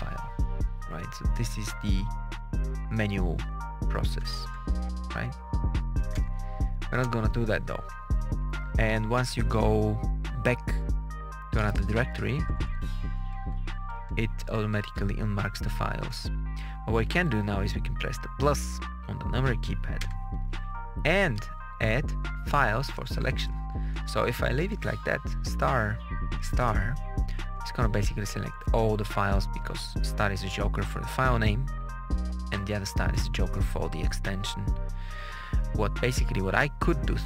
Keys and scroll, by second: 4.4 Page_Up, 6.0 Return, 6.9 Return, 7.3 Down, 7.7 Page_Down, 12.0 Page_Up, 13.1 Page_Down, 15.3 Page_Up, 15.8 Page_Down, 19.9 KP_Add, 22.0 Right, 22.8 BackSpace, 24.8 Left, 25.4 Right, 29.6 Left, 30.5 Left, 31.2 Right, 36.9 BackSpace.